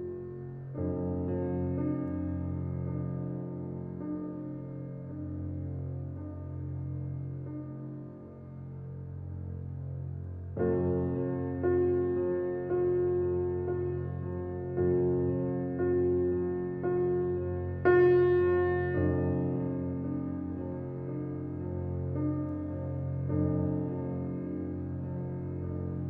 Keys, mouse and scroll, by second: 6.9 Escape, 7.5-10.2 drag.